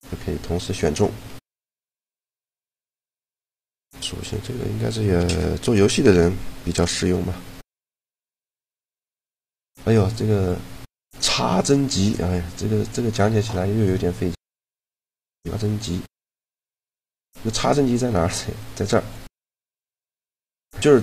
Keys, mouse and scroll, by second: 1.3 x, 7.1 shift+g, 14.2-18.3 drag.